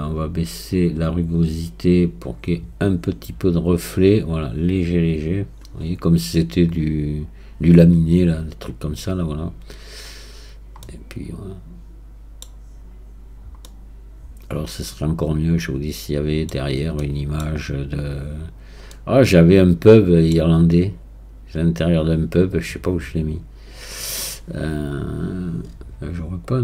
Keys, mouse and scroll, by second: 0.0-1.2 scroll down 3, 1.2-10.0 drag, 10.0 scroll up 2, 10.8-12.8 middle drag, 12.8-13.7 scroll up 1, 13.7-16.5 middle drag, 16.5 scroll down 2, 17.0-18.3 middle drag, 18.3 scroll up 2, 18.9-21.9 middle drag.